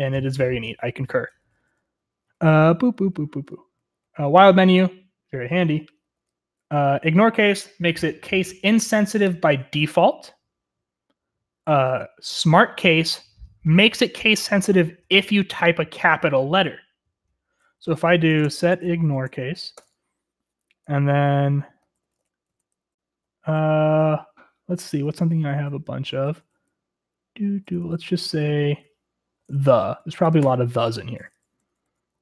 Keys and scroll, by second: 1.3-6.8 typing, 8.4 j, 9.7-10.5 typing, 18.2-19.8 typing, 20.0 Return, 21.4-24.1 typing, 25.4-26.5 typing, 27.6-30.5 typing, 31.9-32.2 typing.